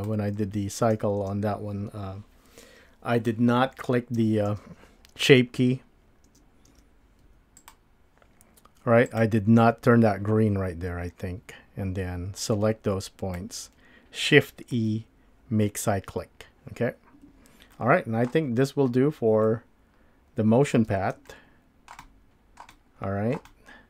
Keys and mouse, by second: 0.0 click, 1.2 space, 4.6 space, 6.3 space, 7.2 space, 7.3 Tab, 9.1 click, 15.8 shift+e, 17.1 Escape, 17.7-18.3 middle drag, 19.4-20.7 middle drag, 21.3-21.9 shift+middle drag, 22.0 shift+middle click, 22.7-23.3 middle drag, 23.5-23.8 shift+middle drag.